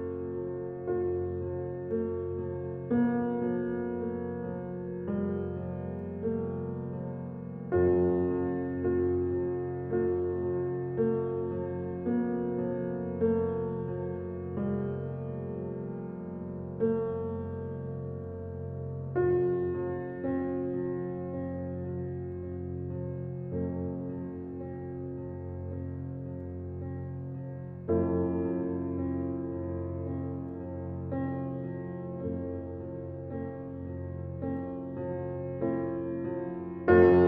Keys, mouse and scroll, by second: 0.0 n, 1.6 shift+a, 2.9 s, 4.3 s, 5.4 g, 6.8 g, 9.3 s, 13.9 click, 14.7 shift+d, 20.8 g, 25.1 g, 26.8 click, 28.2 click, 28.7 click, 29.3 KP_0, 31.9 click, 32.7 scroll up 6, 33.4-34.1 shift+middle drag, 34.1 scroll up 3, 34.7-36.2 shift+middle drag, 37.1 scroll down 5.